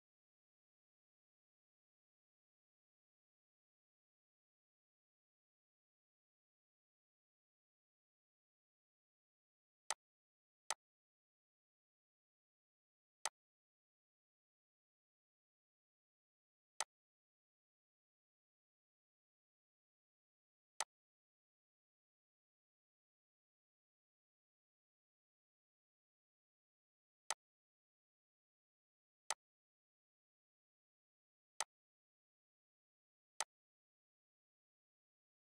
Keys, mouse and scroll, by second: 9.8 click, 13.2-16.8 drag, 20.8-27.3 drag, 31.4 typing, 31.6 click.